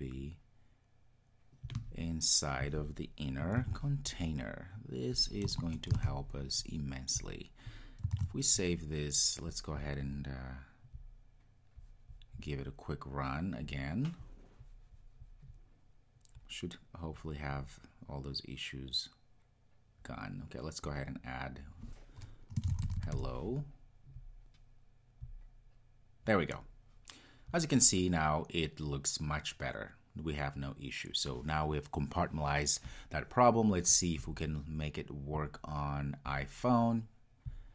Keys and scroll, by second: 3.7 super+x, 5.9 super+x, 6.1 super+v, 8.2 super+s, 13.9 ctrl+r, 37.5 ctrl+r.